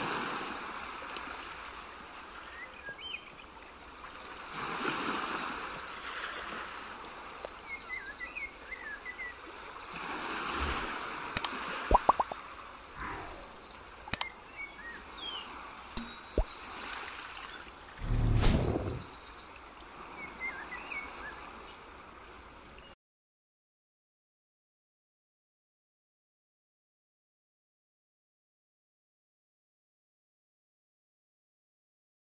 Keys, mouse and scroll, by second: 0.0 ctrl+s, 3.4 click, 4.1 shift+a, 6.8 g, 9.4 middle click, 12.0 e, 14.1 Tab, 16.5 click, 17.8 e, 23.5 middle click, 24.7 scroll up 2, 25.7-26.5 scroll down 1, 28.6 ctrl+r.